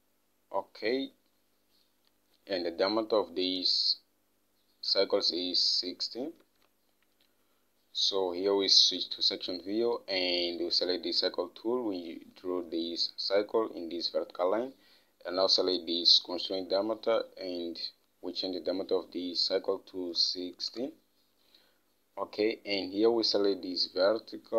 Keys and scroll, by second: 6.8 alt+Tab, 20.1-21.1 typing, 21.1 Return.